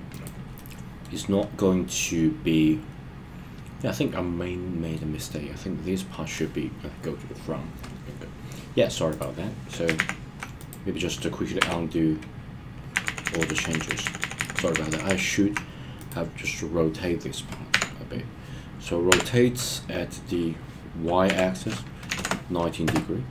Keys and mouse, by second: 0.5-1.0 middle drag, 1.8-4.9 middle drag, 9.0 click, 9.9 super+z, 10.6 click, 11.6 Tab, 13.0 super+z, 13.2 super+z, 13.4 super+z, 13.5 super+z, 13.7 super+z, 14.0 super+z, 14.2 super+z, 14.3 super+z, 14.5 super+z, 14.7 super+z, 15.0 super+z, 17.7 KP_1, 19.1 r, 21.2 y, 22.0 KP_9, 22.2 KP_0, 22.8 Return.